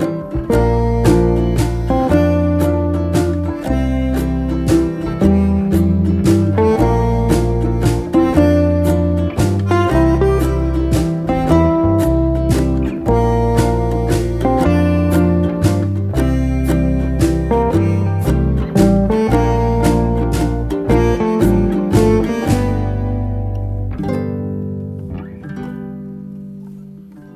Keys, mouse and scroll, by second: 2.2 ctrl+v, 2.3 ctrl+scroll down 1, 2.9-3.5 scroll up 1, 3.7 shift+v, 3.9 shift+scroll down 1, 26.8 6.